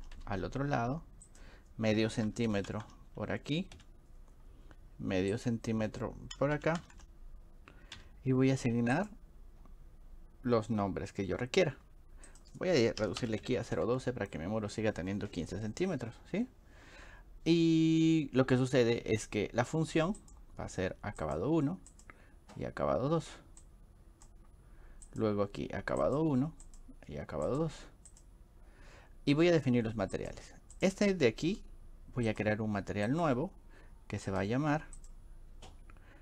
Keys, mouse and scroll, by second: 1.3 click, 5.4 click, 9.0 click, 12.3 click, 20.2 click, 21.2 click, 21.9 click, 23.6 click, 25.1 click, 26.0 click, 26.6 click, 27.5 click, 28.1 click, 30.2 click, 30.8 click, 32.3 click, 34.3 click.